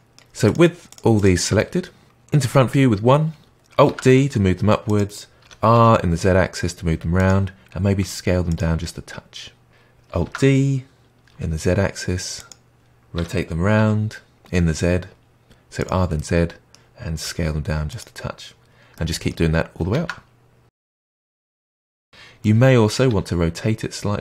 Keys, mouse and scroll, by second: 0.0-0.4 middle drag, 0.4 shift+drag, 0.8 shift+click, 1.1 shift+click, 1.5 middle click, 2.3 KP_1, 3.8 alt+d, 5.4 r, 7.9 s, 8.8-9.7 middle drag, 9.7 g, 10.2 alt+d, 13.1 r, 16.1-17.2 middle drag, 17.2 s, 18.9-19.9 middle drag, 19.9 alt+d, 20.7 r, 21.4 s, 22.3 middle click, 23.0 r.